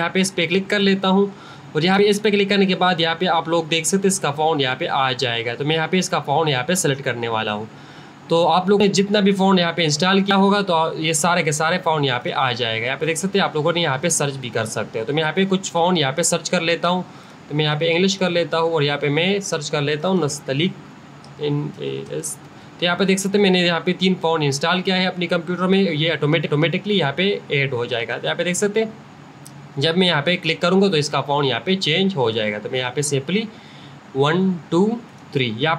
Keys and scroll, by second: 20.4-21.7 typing.